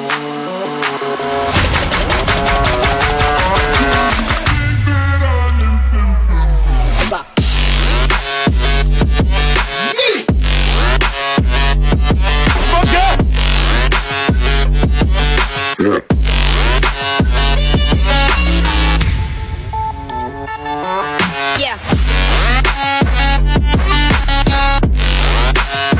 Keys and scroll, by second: 19.2 Up.